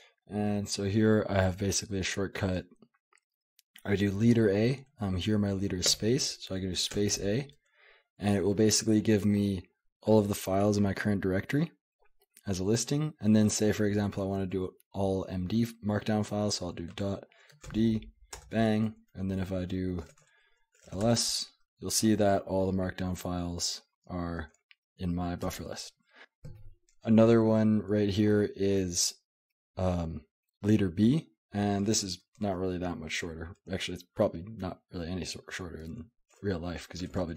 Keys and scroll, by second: 0.0-0.1 typing, 1.9-4.1 typing, 5.9 space, 7.0 space, 7.2 a, 16.9-18.9 typing, 20.1-21.5 typing, 25.5 Return, 27.9 j, 37.1-37.3 typing.